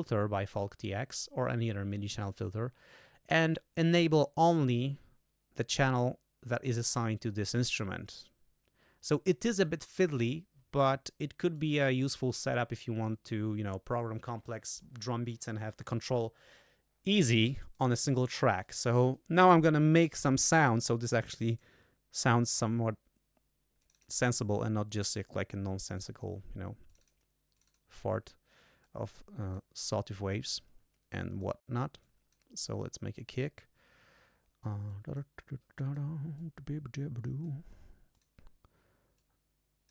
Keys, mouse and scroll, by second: 7.2 click, 11.5-12.7 drag, 17.7 click, 18.6 click, 21.5 click, 22.4 click, 23.8 click, 25.8 click, 26.9 click, 27.5 click, 28.8 click, 31.2 click, 31.9 click, 33.1 click, 34.8 click, 35.7 click, 36.3-37.6 drag, 38.1 click, 39.1 click.